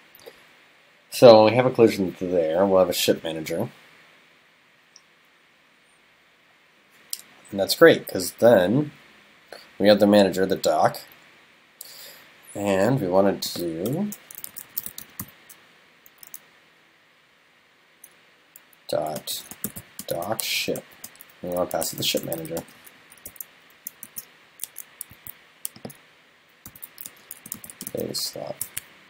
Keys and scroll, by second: 24.1 super+s.